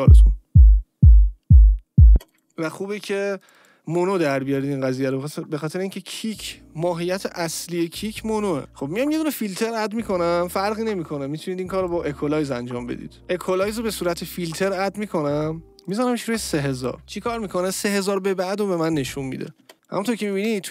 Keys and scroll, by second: 2.0 space, 8.6 Return, 19.6 space, 20.3 space.